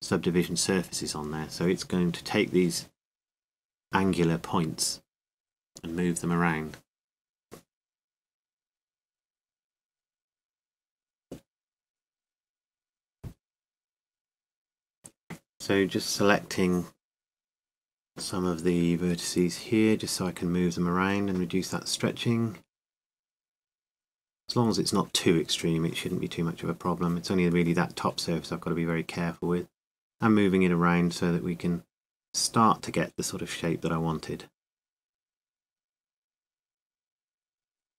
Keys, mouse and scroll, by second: 0.0 r, 3.2 click.